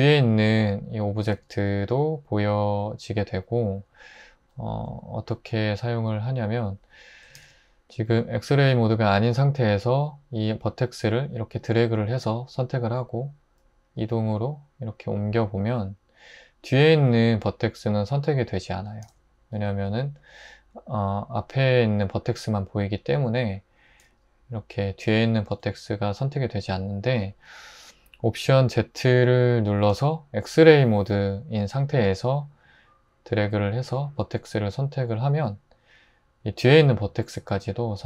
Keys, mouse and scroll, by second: 1.4 alt+z, 7.4 alt+z, 14.0 g, 19.0 super+z, 24.1 g, 25.5 ⟲, 29.8 alt+z.